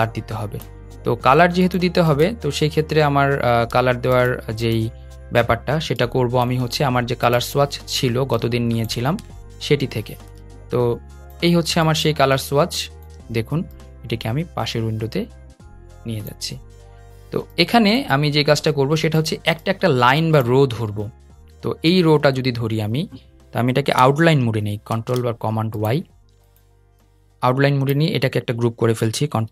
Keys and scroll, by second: 24.6 super+y, 29.0 super+g.